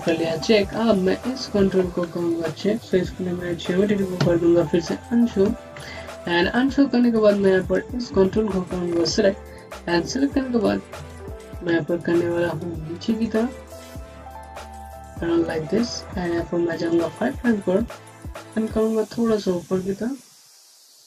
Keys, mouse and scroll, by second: 0.8 alt+middle click, 1.2 scroll up 1, 1.6 scroll down 1, 1.8 scroll up 1, 2.1 middle click, 4.9 alt+2, 5.8 scroll up 1, 7.3 click, 10.1 click, 10.2 scroll up 1, 11.1 alt+middle click, 13.1 click.